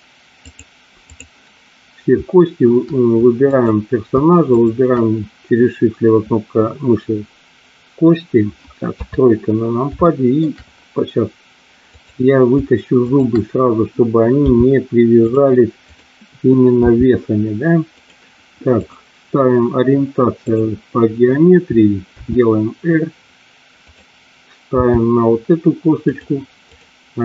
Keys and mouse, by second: 0.5 click, 3.4 click, 4.5 shift+click, 8.8 KP_3, 10.1 shift+middle click, 13.1 shift+click, 14.3 g, 15.2 click, 15.9 click, 16.8 r, 17.9 click, 18.7-20.7 drag, 22.1 r, 24.7 g, 26.1 click.